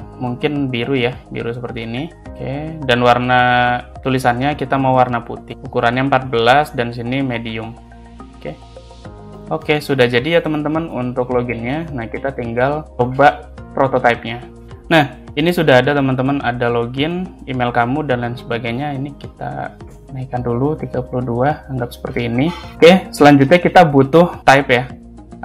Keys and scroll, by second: 10.5 space, 11.8 space, 19.3 3, 19.5 2, 19.8 Return, 21.8 space.